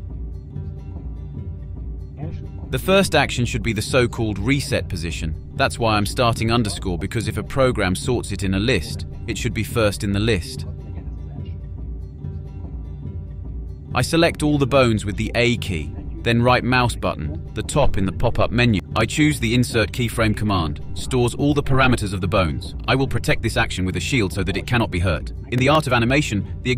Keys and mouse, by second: 0.7 click, 1.3 click, 7.3 Left, 7.7 Left, 8.0 Right, 8.3 Left, 17.8 a, 18.9 click, 26.5 click.